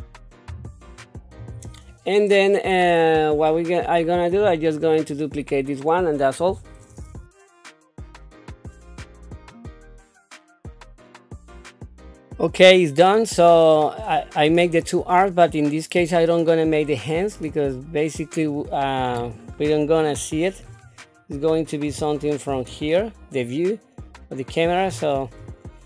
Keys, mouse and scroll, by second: 0.5 g, 1.9-4.3 middle drag, 6.4 KP_7, 7.2 Tab, 7.4-10.0 typing, 8.6 ctrl+KP_3, 9.4 Tab, 9.5 click, 9.9 middle click, 10.1 scroll up 1, 10.2 click, 10.4 click, 10.8 alt+s, 11.1 g, 11.3 click, 11.5 Tab, 11.5 click, 11.6 Tab, 11.7 click, 11.7 g, 11.9 click, 12.2 Tab, 12.2 scroll down 1, 17.2-18.4 middle drag, 19.1-19.6 scroll down 2, 20.1 middle click, 20.8-21.5 scroll down 2, 21.9 shift+middle click, 22.7 middle click, 24.9 scroll up 3.